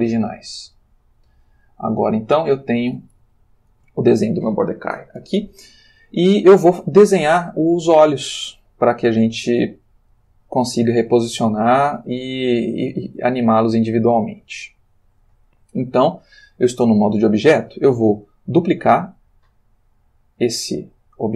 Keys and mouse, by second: 0.2 click, 0.7 click, 3.3 ctrl+middle click, 8.0-10.3 ctrl+drag, 11.7 g, 14.5 Escape.